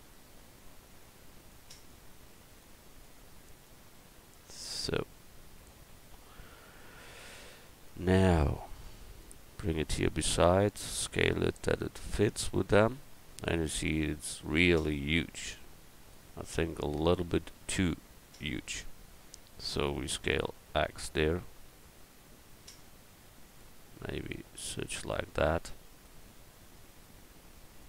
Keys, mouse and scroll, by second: 1.5-4.8 right drag, 5.7-7.3 middle drag, 8.4-10.8 drag, 10.8 s, 15.1-17.8 drag, 17.8-20.0 middle drag, 20.0 s, 20.3-23.3 middle drag, 24.3-26.0 drag, 26.3-27.8 middle drag, 27.3 s.